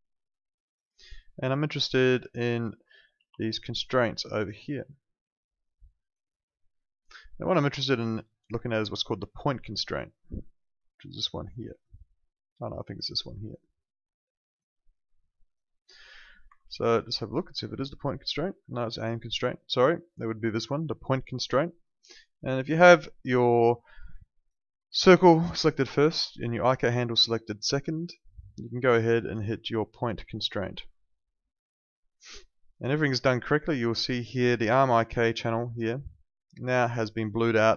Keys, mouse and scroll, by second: 0.6 click, 3.2 ctrl+2, 16.4 Escape, 22.9 click, 26.5 ctrl+shift+click, 30.4 click, 35.5 click.